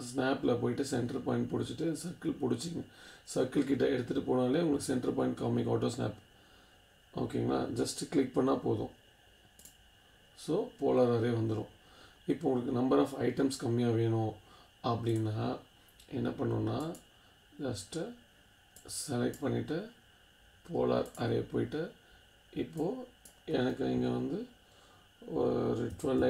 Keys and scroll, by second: 25.7-26.2 typing.